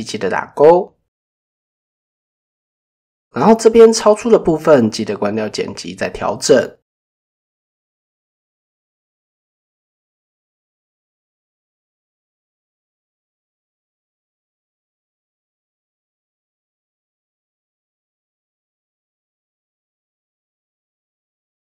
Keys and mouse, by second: 0.1-1.2 drag, 4.8 click, 5.9 shift+middle click, 7.1 click, 8.0 click, 10.3 click, 11.5 shift+middle click, 12.3-13.7 drag, 14.2 click, 14.6-16.1 drag, 16.7 click, 18.2 click, 19.8 shift+middle click, 20.9 click.